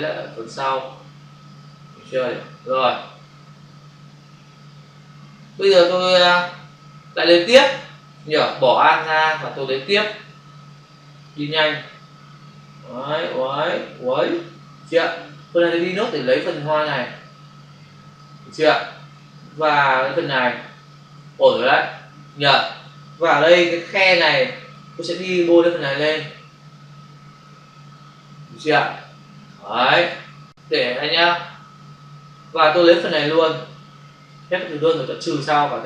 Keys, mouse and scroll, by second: 4.9 space, 11.1 click, 15.3 click, 17.4 click, 19.1 click, 23.2 space, 23.4 ctrl+click, 25.4 click, 30.3 ctrl+-, 33.3 click.